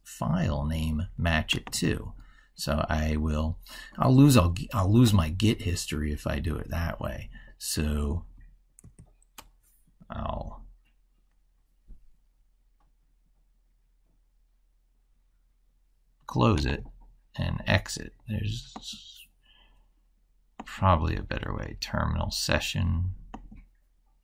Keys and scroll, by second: 8.6 ctrl+b.